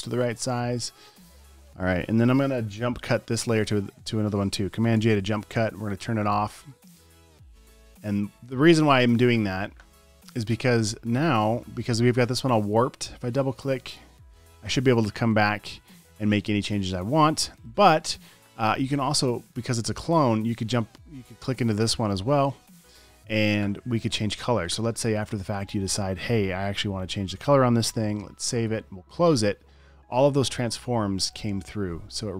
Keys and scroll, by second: 2.7 Return, 5.3 super+j, 14.2 space, 17.4 super+w, 23.1 space, 23.5 space, 27.1 alt+BackSpace, 28.4 super+s, 29.0 super+w.